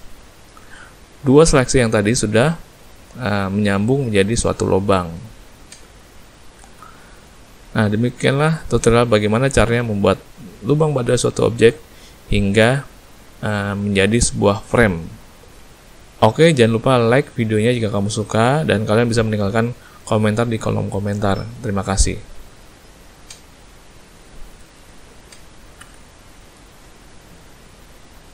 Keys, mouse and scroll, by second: 2.9 middle click, 4.0 middle click, 5.7 Tab, 6.1 middle click, 6.5 a, 6.7 a, 6.8 middle click, 9.5 middle click, 13.2 middle click, 14.4 middle click, 15.2 shift+middle click, 15.8 middle click, 16.3 middle click.